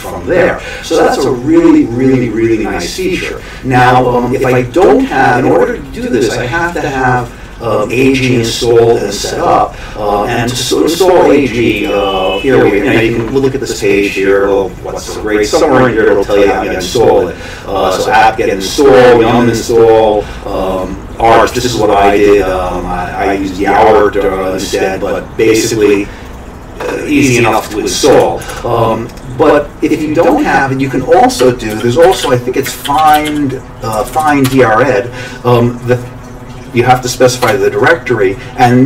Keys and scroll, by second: 28.5 alt+Tab, 31.4 Escape, 31.5-33.7 typing, 33.9 Down, 34.1 Down, 34.2 Down, 34.4 Return, 37.4 Return.